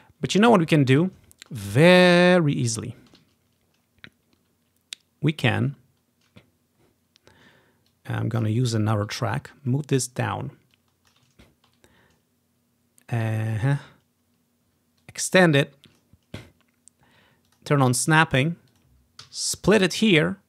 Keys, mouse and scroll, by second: 1.5-2.8 ctrl+scroll up 1, 2.8 typing, 5.6 typing, 5.8-6.9 ctrl+scroll down 1, 6.9 ctrl+scroll up 1, 8.0 click, 10.9-12.9 drag, 10.9 typing, 11.5-12.0 ctrl+scroll up 1, 13.7 typing, 15.1-16.1 drag, 17.6 click, 18.8 click, 19.4 click, 19.4 s.